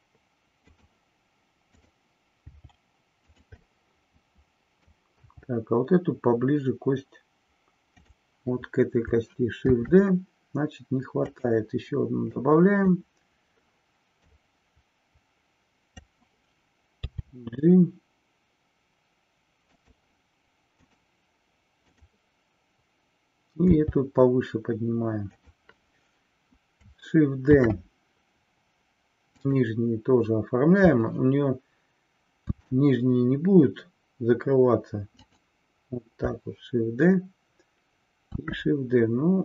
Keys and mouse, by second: 0.8 click, 1.8 click, 3.4 click, 3.6-5.1 middle drag, 5.2 g, 9.7 shift+d, 11.4 click, 12.4-13.0 drag, 14.2-16.1 drag, 19.8 click, 20.7 click, 22.0 click, 27.6 shift+d, 29.5 click, 32.5 shift+d, 35.4 click, 38.4 shift+d.